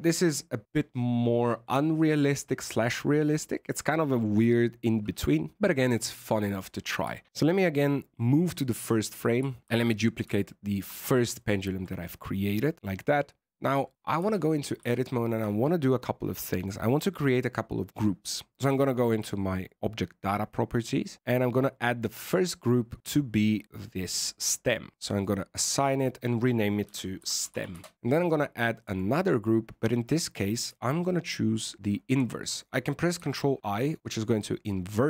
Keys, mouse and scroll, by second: 8.1 click, 9.1 scroll down 2, 9.6 shift+d, 11.0-11.3 scroll up 5, 11.3 shift+middle click, 12.0-12.6 scroll down 3, 14.1 Tab, 14.5-14.9 scroll up 4, 14.9 shift+middle click, 19.6 click, 33.1 ctrl+i.